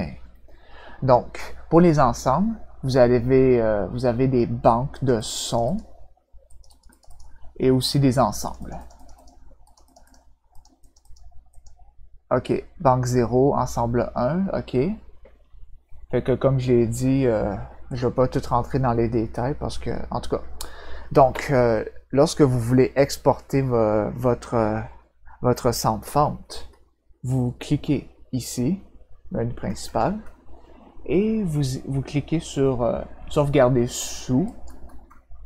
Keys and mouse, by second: 4.9 click, 5.2 click, 5.4 click, 5.6 click, 6.4 click, 6.6 click, 6.9 click, 7.0 click, 8.4 click, 8.5 click, 8.7 click, 8.9 click, 9.1 click, 9.6 click, 9.8 click, 10.0 click, 10.5 click, 10.8 click, 11.0 click, 11.5 click, 17.9 click, 29.8 click, 34.4 click.